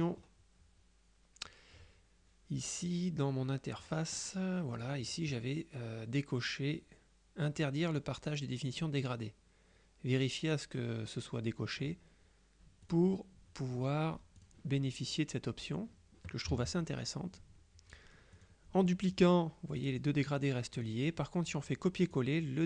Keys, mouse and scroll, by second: 0.3-0.8 scroll down 2, 4.9 click, 12.9 click, 14.5 click, 16.6 g, 18.5 click, 19.2 click, 20.3 click, 22.1 click.